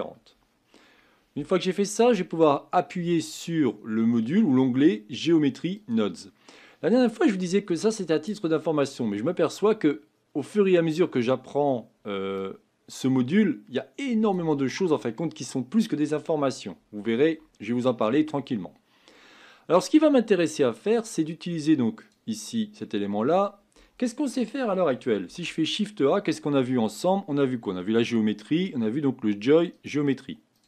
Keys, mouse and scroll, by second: 1.5 click, 5.8-18.4 drag, 18.4-19.4 scroll up 3, 19.8 scroll down 1, 20.4-20.8 scroll up 1, 22.1-30.6 drag.